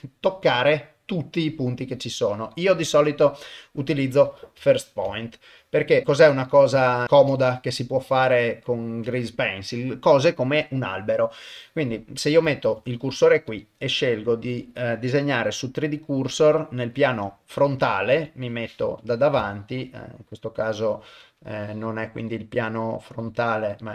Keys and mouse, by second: 2.5-4.4 drag, 4.7 ctrl+middle click, 5.7 shift+middle click, 6.8 shift+middle click, 7.4 shift+middle click, 8.2 middle click, 8.7 shift+middle click, 12.6 shift+right click, 13.5-14.7 drag, 15.4-17.2 drag, 17.5 middle click, 18.1 KP_1, 19.5 shift+middle click, 22.2-23.9 drag.